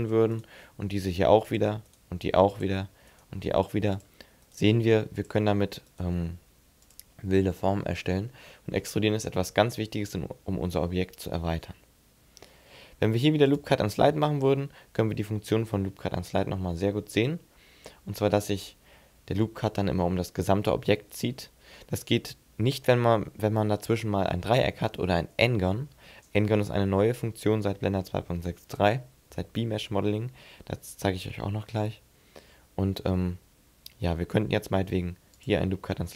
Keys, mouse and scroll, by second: 0.2 right click, 0.5 e, 1.4 click, 1.7 right click, 1.9 e, 2.4 click, 2.9 right click, 3.2 e, 3.9 click, 4.3 right click, 4.5 e, 5.0 click, 5.7 right click, 6.0 e, 6.7 click, 7.2 middle click, 8.4 shift+middle click, 9.6 middle click, 10.8 shift+middle click, 13.2 click.